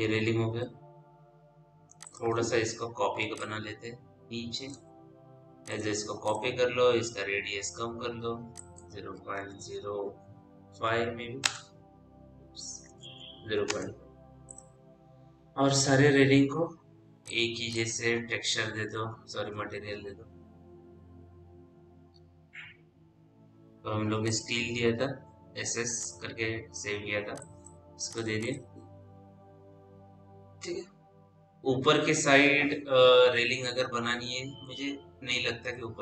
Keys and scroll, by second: 9.5 KP_0, 9.9 KP_Decimal, 10.4 KP_5, 11.3 Return, 12.5 KP_0, 13.3 KP_5, 13.5 Return, 19.3 m.